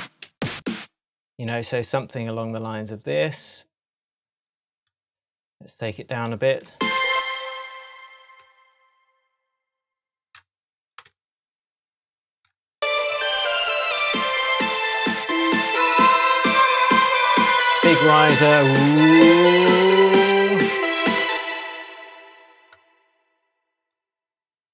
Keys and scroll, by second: 6.7 space, 8.4 super+d, 10.4 super+d, 21.2 space.